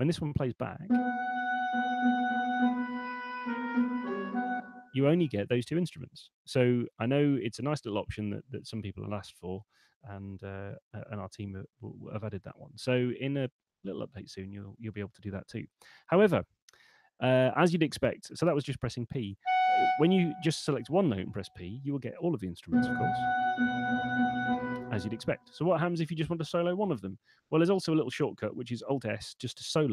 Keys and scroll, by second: 4.5 space, 21.5 p, 24.7 space, 29.7 alt+s.